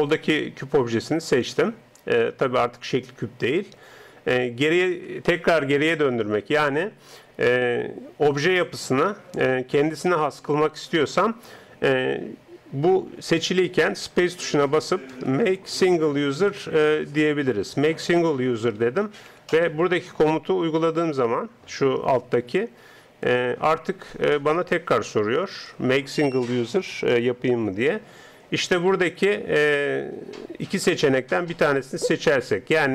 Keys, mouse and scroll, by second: 14.1 space.